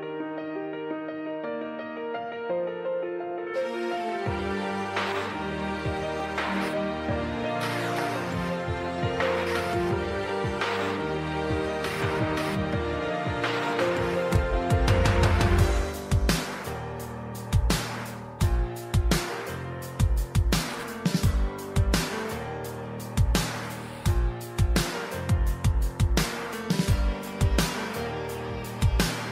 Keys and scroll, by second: 5.1 v, 8.9 v, 10.1 typing.